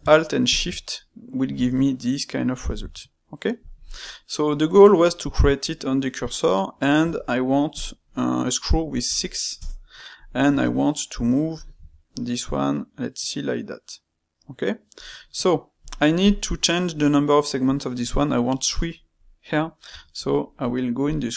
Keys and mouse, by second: 3.7-8.6 middle drag, 16.2 click, 16.6-19.8 middle drag, 19.8 space.